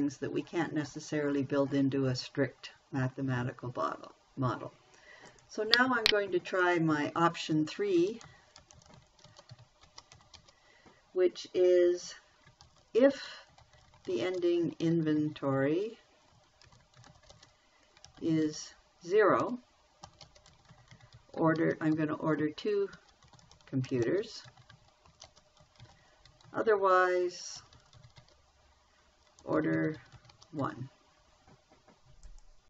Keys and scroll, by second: 8.3-10.8 typing, 13.0-31.5 typing.